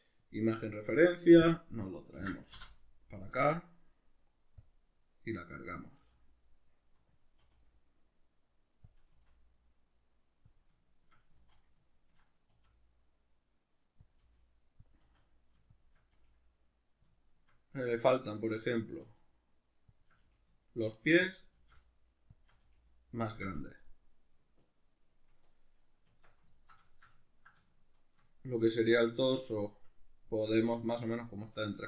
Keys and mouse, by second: 5.7 right click, 6.0 s, 7.3 click, 7.4 g, 8.9 click, 9.1 s, 10.6 click, 10.9-14.1 shift+middle drag, 11.3 z, 12.5 s, 14.1 click, 14.2 g, 14.9 click, 15.0 s, 15.8 shift+click, 16.1 g, 17.1 shift+click, 18.8 s, 20.0 shift+click, 20.2 g, 21.4 shift+click, 21.5 s, 22.4 shift+click, 22.6 g, 23.3 shift+click, 25.7 right click, 26.0 Tab, 26.5-31.8 ctrl+middle drag.